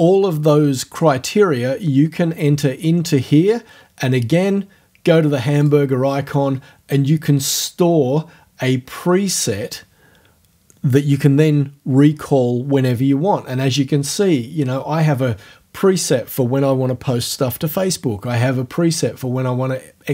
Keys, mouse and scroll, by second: 5.6 click.